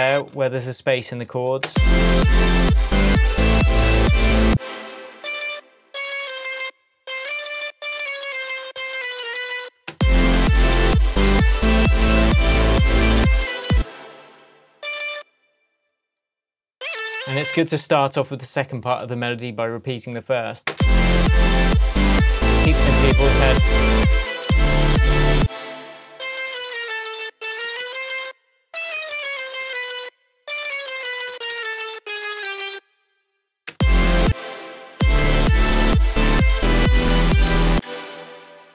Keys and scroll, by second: 1.6 space, 4.4 space, 13.7 space, 17.6 super+d, 20.7 space, 25.3 space, 26.4 Down, 33.3 Down, 33.7 space, 37.7 space.